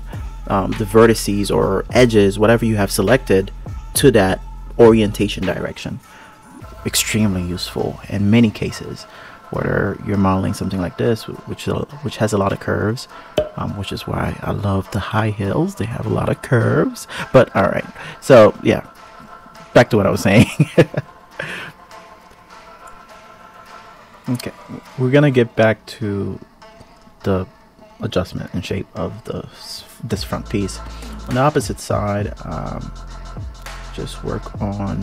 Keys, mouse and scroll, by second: 0.3 click, 1.3 g, 3.1 click, 3.4 g, 5.5 click, 7.3 click, 9.7 click, 14.8 click, 16.7 click, 17.6 click, 19.6 click, 21.7 click, 22.5 KP_1, 22.9 KP_3, 23.2 click, 24.1 shift+click, 25.3 click, 27.5 g, 28.7 g, 34.0 KP_1, 34.3 KP_3, 34.9 ctrl+KP_3.